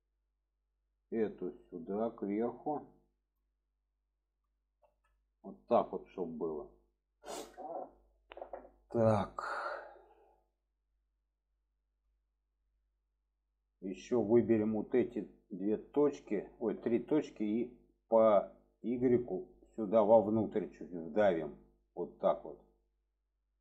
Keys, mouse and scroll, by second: 1.2 shift+middle click, 2.2-3.4 drag, 4.0-4.3 shift+middle drag, 4.8 alt+z, 5.5-6.8 middle drag, 7.4-8.7 middle drag, 9.3-11.2 middle drag, 11.7 shift+middle drag, 12.6 shift+middle click, 13.1 middle click, 14.5 shift+click, 15.8 shift+click, 16.2 middle click, 17.4 middle click, 19.0-22.1 drag, 22.7-23.6 middle drag.